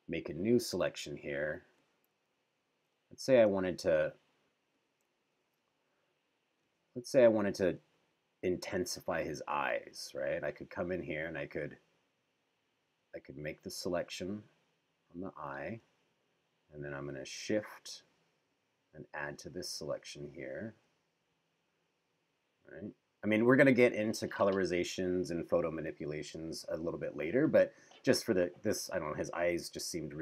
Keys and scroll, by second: 2.3 super+=, 3.7 super+=, 5.3 super+=, 7.2 [.